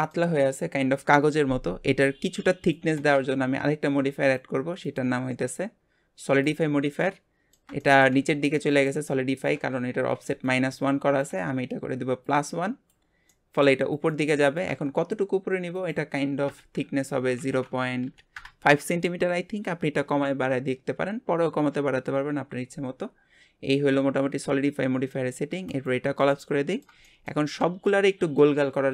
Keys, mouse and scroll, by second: 4.2-7.0 drag, 7.0-11.5 middle drag, 12.2-13.3 drag, 13.3-15.7 middle drag, 15.7-18.8 drag, 25.7 click, 26.3-28.9 middle drag.